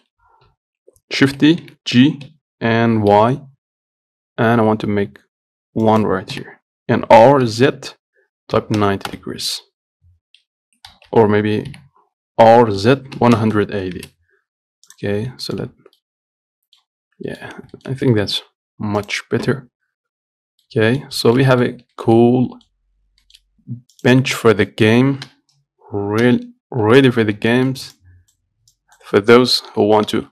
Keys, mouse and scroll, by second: 0.1-1.5 shift+middle drag, 1.5 shift+d, 6.6 r, 11.2 ctrl+z, 12.0 r, 15.2 click, 15.4-15.7 scroll up 1, 15.7 shift+middle click, 16.0 scroll down 1, 16.3 middle click, 17.1 scroll down 1, 17.5 middle click, 17.7-18.5 scroll up 3, 18.0 shift+middle click, 18.5-20.6 shift+middle drag, 20.6-20.9 scroll down 2, 20.9 middle click, 21.4 scroll up 1, 21.5-23.2 shift+middle drag, 23.2-23.5 scroll up 1, 23.5 shift+middle click, 24.2 click, 24.5 Tab, 25.0 middle click, 25.5 KP_1, 27.0 scroll up 2, 27.2 shift+middle click, 27.8 shift+middle click, 28.2-30.0 drag, 30.0 g.